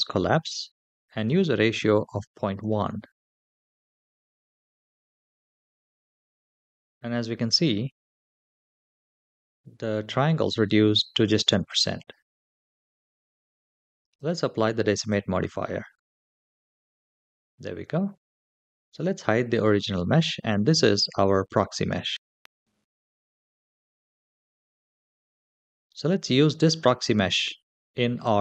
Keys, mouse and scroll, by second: 0.9-3.8 drag, 13.8-15.0 drag, 19.4 click, 20.9-21.2 shift+middle drag, 22.1 space.